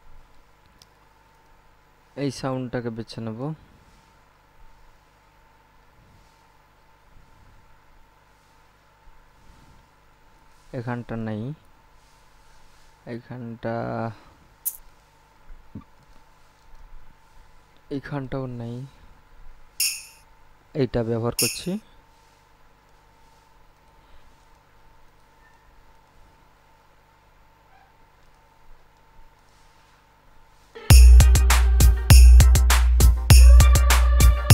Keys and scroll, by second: 30.9 space.